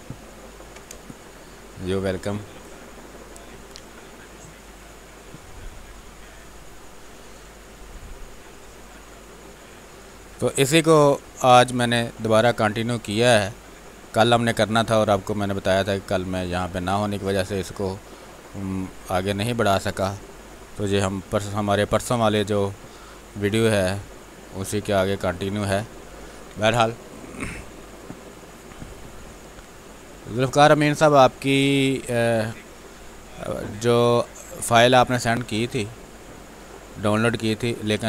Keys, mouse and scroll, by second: 0.0-1.4 typing, 1.0 click, 2.0-5.4 drag, 5.4 space, 5.8 click, 6.5 space, 6.6 click, 7.0 space, 7.8 click, 11.4 b, 11.5 space, 11.5 click, 11.9 space, 12.6-14.9 drag, 15.0 click, 15.4 space, 16.8-21.7 drag, 21.7 b, 22.0 space, 22.3 click, 22.5 space, 23.4 click, 26.0 space, 26.2-33.4 alt+drag, 33.4 space, 35.3-38.0 drag.